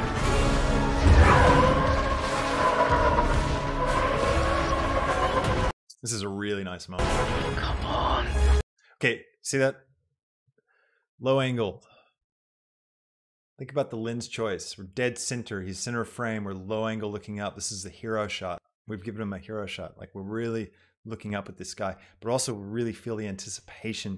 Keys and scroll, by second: 5.7 space, 8.6 space, 10.3 space.